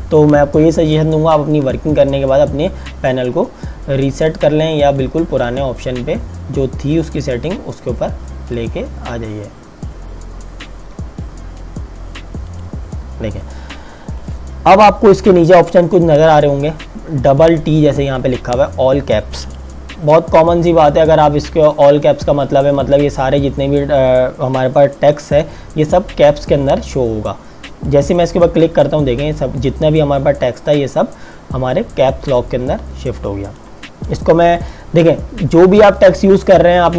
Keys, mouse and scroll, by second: 4.8 click, 12.6 click, 15.2 click, 21.2 click, 27.8 click, 33.4 click.